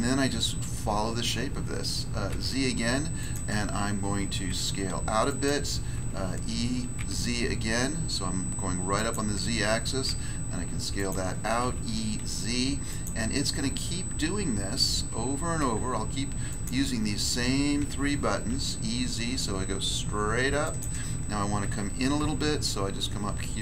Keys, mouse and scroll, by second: 2.3 z, 3.2 click, 4.5 s, 5.3 click, 5.9 e, 6.9 z, 8.9 click, 10.0 s, 10.9 click, 11.6 e, 12.2 z, 12.9 click, 15.6 s, 16.5 click, 17.7 e, 18.5 z, 20.6 click, 21.6 e, 22.2 z.